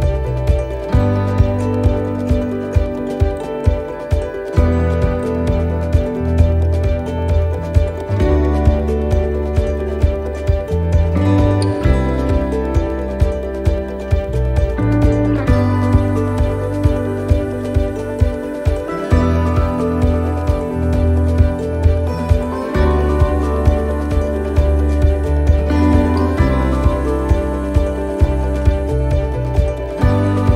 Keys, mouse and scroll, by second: 0.3 shift+middle click, 0.8 middle click, 1.4 shift+middle click, 1.9 scroll up 3, 2.4 shift+middle click, 2.9 scroll up 2, 3.6 middle click, 4.5 click, 6.1 middle click, 6.9 shift+middle click, 8.3 click, 9.7 middle click, 10.1 scroll down 2, 10.5 shift+middle click, 11.0 middle click, 11.9 click, 13.7 a, 14.5 shift+d, 15.5 click, 18.8 shift+d, 19.8 click, 23.0 click, 24.1 right click, 24.9 shift+right click, 25.5-26.1 scroll down 1, 26.8 click.